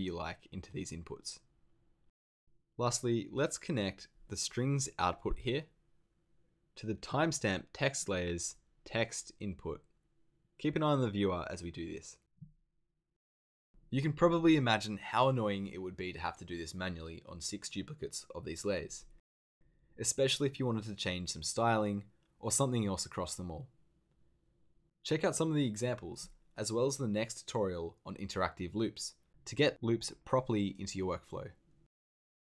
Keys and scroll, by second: 26.5 super+z.